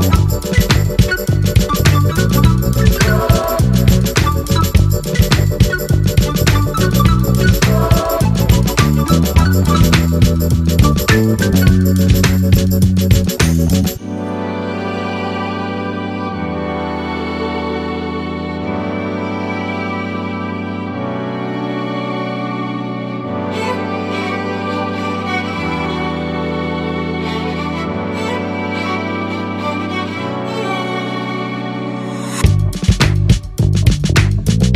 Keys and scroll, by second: 1.8 ctrl+a.